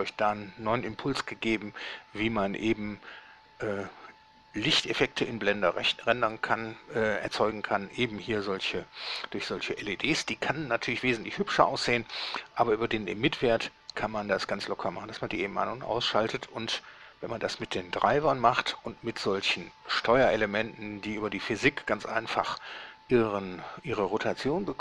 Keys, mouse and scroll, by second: 18.4 Escape.